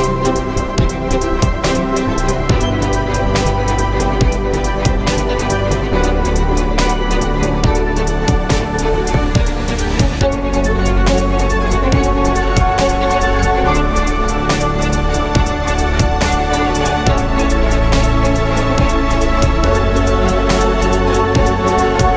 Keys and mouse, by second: 4.4 shift+d, 10.8 s, 12.9 s, 15.6 s, 19.9 Tab, 20.6 shift+a, 21.9 s.